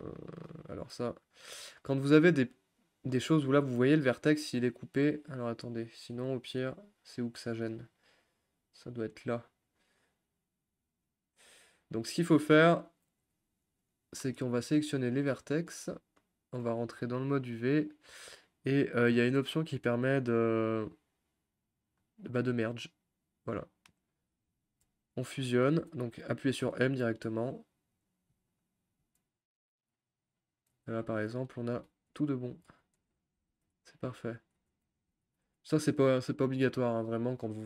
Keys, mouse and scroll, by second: 1.0 click, 6.3 shift+middle click, 6.5-7.3 shift+scroll up 4, 7.3-8.6 shift+middle drag, 8.6-11.3 scroll up 1, 13.9 click, 15.1-15.7 drag, 25.3 click, 28.0 m, 31.0 g, 31.8 ctrl+z, 32.2 click, 32.7 g, 33.5 ctrl+z, 34.1 click, 34.6 g, 35.2 ctrl+z, 35.7 click, 36.3 g, 37.1 ctrl+z.